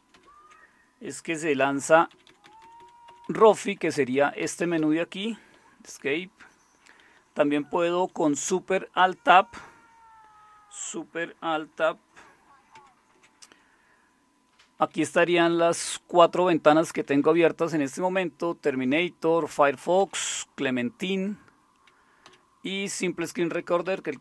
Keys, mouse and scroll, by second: 0.1 alt+super+d, 1.7 Down, 1.9 Down, 2.1 Down, 2.3 Down, 2.4 Down, 2.6 Down, 2.8 Down, 3.1 Up, 3.2 Up, 3.4 Up, 3.6 Up, 3.7 Up, 3.9 Up, 4.4 Down, 4.6 Down, 4.7 Down, 6.0 Escape, 7.3 Down, 7.6 Down, 8.4 Down, 12.7 alt+super+Tab, 14.7 Down, 15.0 Down, 15.2 Down, 16.8 Up, 17.1 Up, 17.2 Up, 19.0 Down, 20.0 Down, 22.2 Down, 23.8 Up.